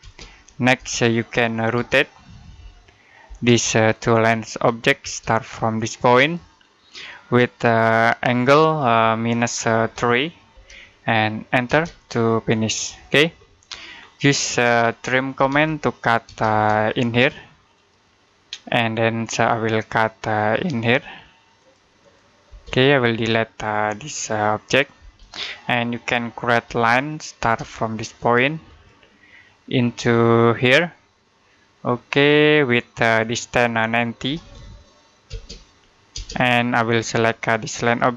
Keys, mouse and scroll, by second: 1.6-3.1 typing, 3.8 click, 4.9 space, 6.0 click, 9.6-10.4 typing, 11.5 space, 13.3 middle click, 13.8-15.2 scroll up 1, 15.0-16.1 typing, 17.0 click, 21.4 click, 22.3 space, 22.5 click, 24.8 Delete, 26.5 l, 27.2 space, 28.5 click, 33.9-34.8 typing, 36.9 click.